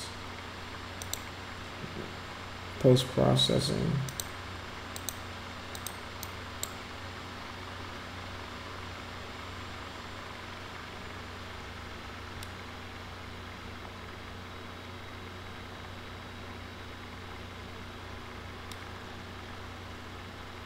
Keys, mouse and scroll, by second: 1.0 click, 4.1 click, 4.9 click, 5.7 click, 6.2 click.